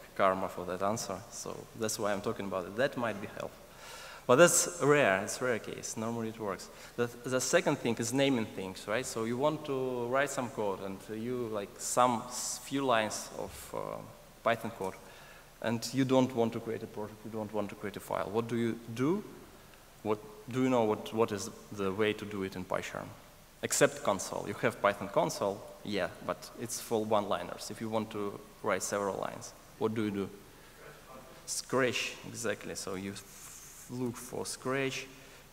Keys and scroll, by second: 33.0 ctrl+shift+super+a.